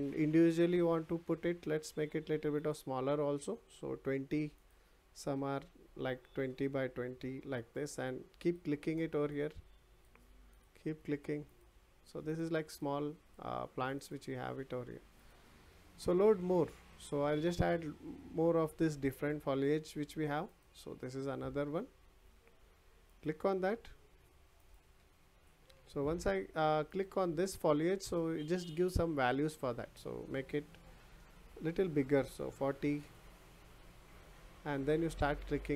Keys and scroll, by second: 6.3 BackSpace, 6.9 2.